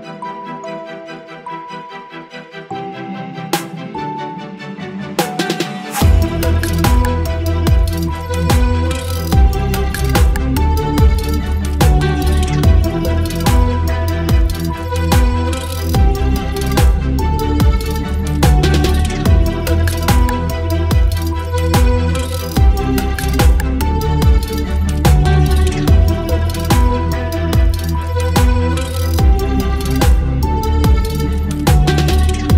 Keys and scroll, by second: 6.2 ctrl+BackSpace, 6.6 ctrl+d, 11.5 ctrl+BackSpace, 11.9 ctrl+d, 14.2 Delete, 14.6 ctrl+d, 19.4 ctrl+BackSpace, 19.7 ctrl+d, 20.7 space, 22.3 space.